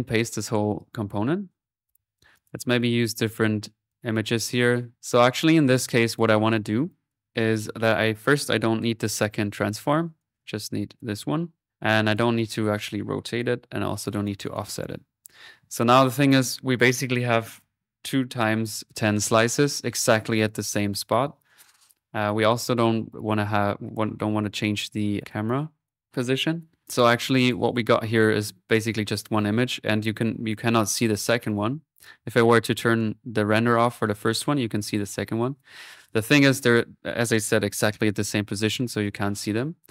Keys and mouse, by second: 0.3 ctrl+v, 1.0 ctrl+middle click, 2.3 click, 3.9 click, 4.9 click, 5.7 middle click, 6.0 click, 6.9 click, 8.3 click, 9.2 Delete, 10.2-11.9 drag, 12.1 click, 13.1-14.9 drag, 16.3 click, 22.6 click, 24.5 click, 25.4 click, 30.0 click, 31.9 click, 33.0 click, 34.8-36.1 drag, 38.4 middle click, 38.7 click.